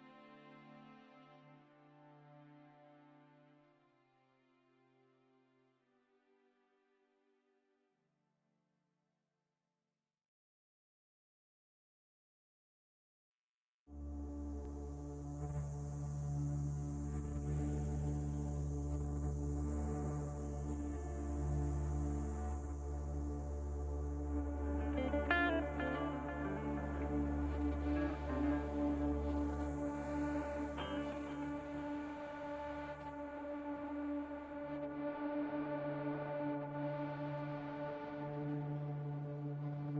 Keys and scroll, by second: 4.6 KP_Divide, 14.7 Tab, 17.0 KP_Divide, 19.0 shift+z, 20.0 shift+z, 24.3 Tab, 25.8 i, 35.0 ctrl+r, 38.3 ctrl+r.